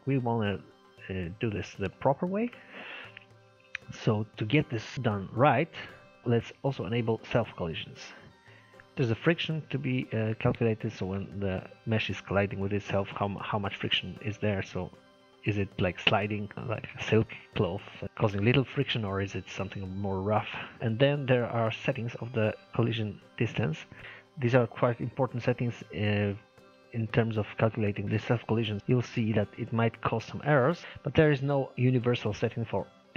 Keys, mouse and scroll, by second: 0.0-0.4 scroll down 1, 0.4-3.7 middle drag, 3.7 click, 4.9-6.1 drag, 6.1 scroll down 1, 6.2 shift+middle click, 6.6 click, 10.0 scroll down 1, 10.1-13.1 middle drag, 24.0-26.1 middle drag, 26.1-26.5 scroll up 1, 26.5-28.8 middle drag, 28.8 scroll down 3, 28.9 middle click, 29.7-30.1 scroll up 1, 30.1-31.7 shift+middle drag.